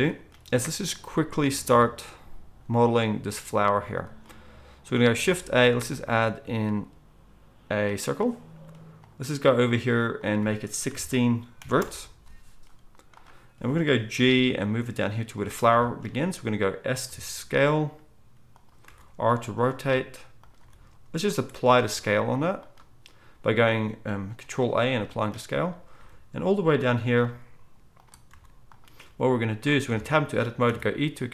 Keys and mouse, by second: 5.1 shift+a, 14.1 g, 15.7-31.3 shift+right drag, 17.1 s, 18.8 r, 19.8 s, 20.6 g, 21.6 ctrl+a, 26.0 g, 27.2 s, 28.2 r, 29.8 Tab, 29.8 g, 30.6 e.